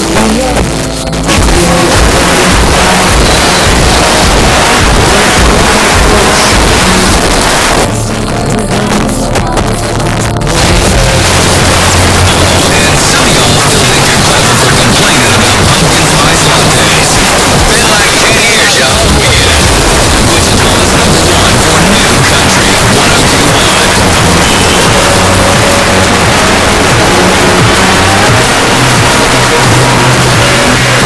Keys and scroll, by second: 1.6 typing, 7.2 Page_Down, 10.1 typing, 31.0 space.